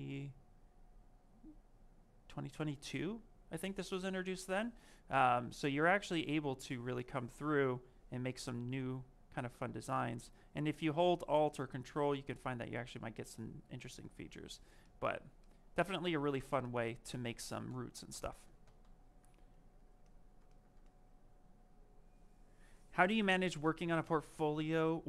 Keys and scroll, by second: 6.6 ctrl+z, 10.7 ctrl+z, 17.8 ctrl+z.